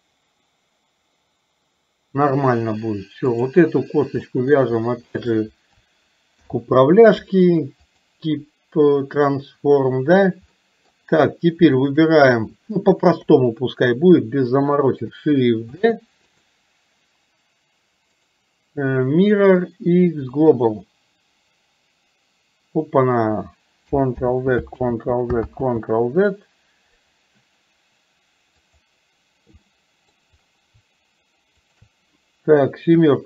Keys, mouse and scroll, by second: 3.4 click, 4.4 middle click, 5.2 shift+click, 10.6 middle click, 11.9 shift+click, 13.2 KP_7, 15.7 shift+d, 24.4 ctrl+z, 24.9 ctrl+z, 28.6 click, 29.7 middle click, 31.7 shift+click, 33.0 KP_7.